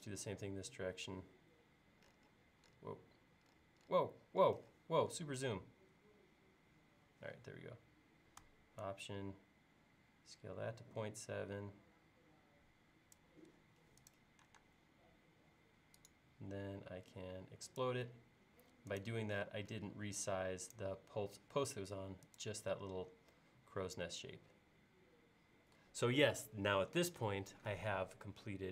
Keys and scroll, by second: 14.7 space.